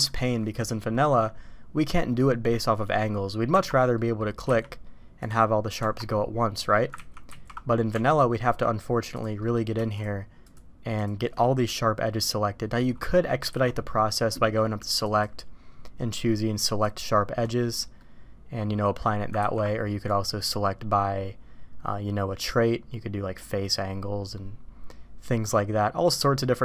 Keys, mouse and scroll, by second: 2.5-3.0 middle drag, 3.5 Tab, 3.9-4.2 middle drag, 4.5 q, 5.8 Tab, 7.0 ctrl+z, 7.3 ctrl+z, 7.9 Tab, 8.4 middle click, 9.0 click, 9.4 middle click, 10.4 shift+click, 11.4 middle drag, 12.6-13.3 middle drag, 13.5 alt+a, 13.7 middle drag, 14.9-16.9 drag, 18.0-19.0 middle drag, 19.3 ctrl+z, 20.0-26.3 drag.